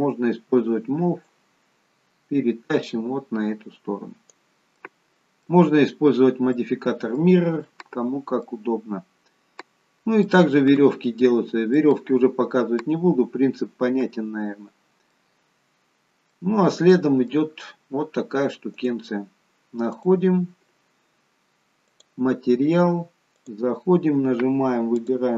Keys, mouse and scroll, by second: 1.3 click, 4.8 middle click, 5.7-6.5 scroll up 2, 6.6 middle click, 8.0-8.4 scroll down 1, 8.4 middle click, 10.7-11.2 scroll down 1, 11.2 scroll up 3, 11.7 middle click, 15.2-15.9 scroll down 1, 15.9-16.3 scroll down 2, 16.3 middle click, 18.7 click, 19.9 click, 22.1 click, 23.3 click.